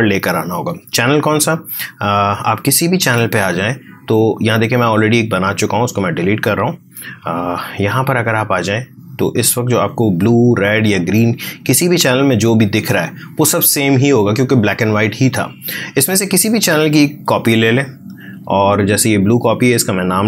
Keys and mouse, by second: 0.2 space, 2.3-7.4 drag, 13.5 click, 16.3-19.2 drag.